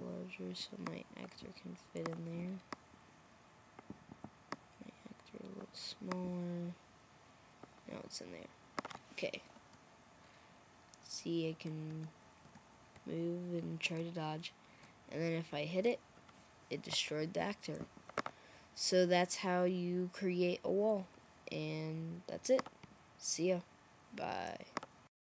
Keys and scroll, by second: 9.6-11.0 Right, 10.2 Right, 10.3 Right, 10.4 Right, 10.5 Right, 10.7 Right, 10.8 Right, 12.8 Down, 13.4 Down, 13.9 Up, 14.5 Up, 15.4 Up.